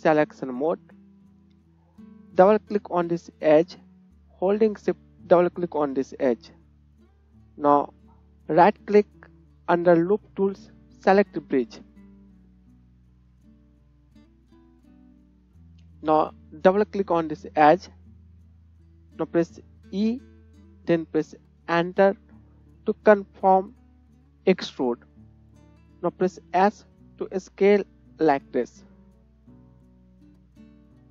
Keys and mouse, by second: 0.7-2.9 drag, 3.0 click, 5.3 shift+click, 8.1 middle click, 8.5-31.1 right drag, 17.1 click, 17.1 middle click, 19.9 e, 26.2 s, 30.9 KP_1.